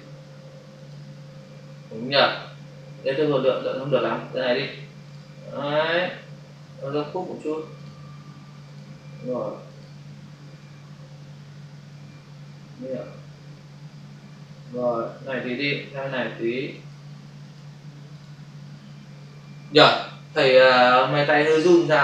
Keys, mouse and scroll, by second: 0.7 click, 2.6 Delete, 5.1 click, 7.7 click, 8.6 click, 16.7 click, 17.4 click, 18.3 double click, 20.0 Delete.